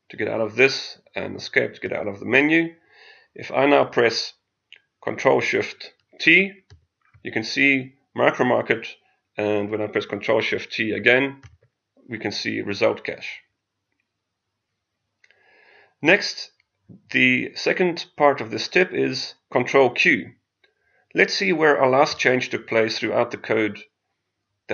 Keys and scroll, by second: 6.6 ctrl+shift+t.